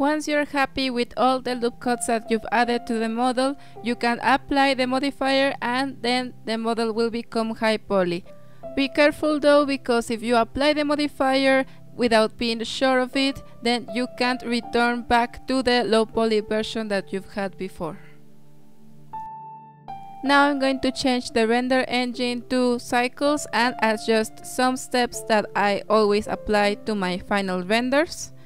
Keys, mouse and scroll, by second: 0.4-0.9 scroll down 3, 0.6 Tab, 0.7 ctrl+s, 0.9-1.9 middle drag, 1.9-3.5 drag, 3.5 Tab, 4.1 middle click, 4.7 click, 5.1-5.5 scroll up 5, 6.1 scroll down 4, 6.9-8.0 shift+middle drag, 8.0 Tab, 8.4-8.9 middle drag, 8.9 shift+a, 9.8-10.1 scroll down 5, 10.1 s, 11.2 r, 12.8 scroll up 3, 12.9-13.7 shift+middle drag, 13.7 scroll up 3, 14.6 scroll up 1, 14.7-16.0 middle drag, 16.3 click, 16.9 ctrl+alt+KP_0, 18.6 click, 19.2-21.9 drag, 21.9 KP_0, 22.4 BackSpace, 23.7-25.4 drag, 25.4-26.7 scroll down 12, 25.8 drag, 26.7-27.5 scroll down 1, 27.5-28.4 drag.